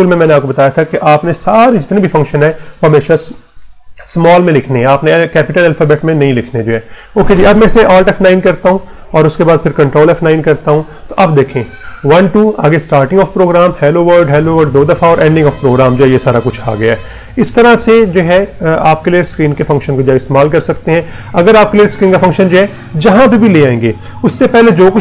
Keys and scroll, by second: 8.0 alt+F9, 9.0 Return, 9.8 ctrl+F9, 17.0 Return.